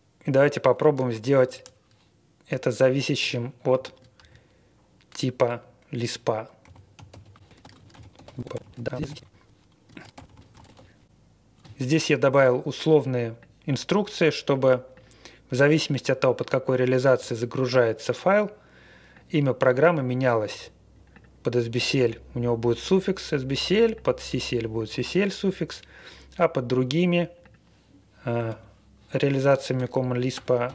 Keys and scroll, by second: 0.8 Return, 1.3 shift+3, 2.4-5.2 typing, 6.3-11.3 typing, 28.4 -, 29.0 Down, 29.3 Right, 29.7-30.7 typing, 29.9 Left.